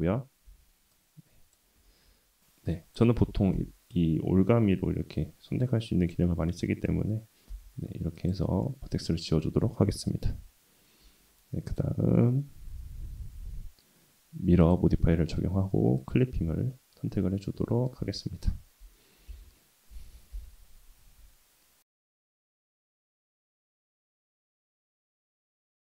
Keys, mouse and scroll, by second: 0.5 w, 1.1 click, 1.8 ctrl+z, 2.4 w, 2.7 click, 3.2 w, 3.5 w, 3.9-6.1 drag, 6.5 middle click, 7.5 x, 8.6-9.9 middle drag, 11.7-14.7 drag, 16.0 click, 16.7-17.9 middle drag, 18.0 Tab, 19.3 KP_1, 20.3 /, 22.4 KP_7, 23.1 g, 24.0 middle click, 24.5 s, 25.5 g.